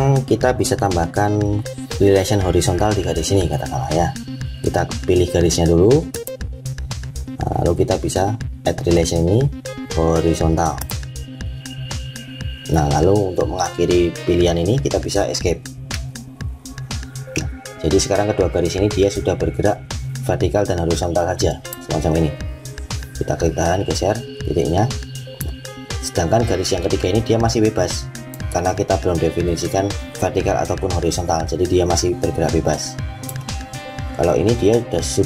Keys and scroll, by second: 15.0 Escape.